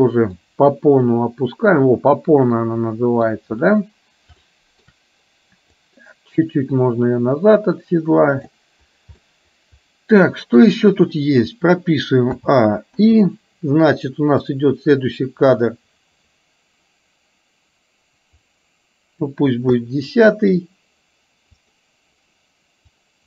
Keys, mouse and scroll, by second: 0.4-3.4 middle drag, 4.4-5.1 shift+middle drag, 5.9-8.9 drag, 9.3-10.6 middle drag, 12.3 a, 13.1 i, 14.6-19.3 drag, 19.8-20.6 middle drag, 21.6 click, 22.9-23.2 drag.